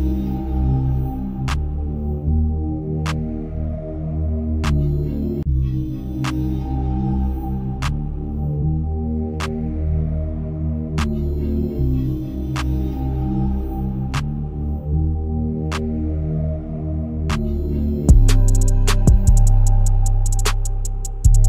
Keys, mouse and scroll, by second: 0.8 Tab, 1.4-3.8 middle drag, 3.8-5.4 drag, 5.4 middle click, 5.9 right click, 7.1 KP_0, 8.0 shift+middle click, 8.8-9.4 scroll down 2, 9.4-10.2 scroll up 1, 10.2 click, 11.5 click, 11.9-14.1 drag, 14.1 KP_0, 14.3 KP_0, 16.9 n, 18.0 click, 18.5-19.4 scroll down 1, 19.4-21.4 shift+middle drag.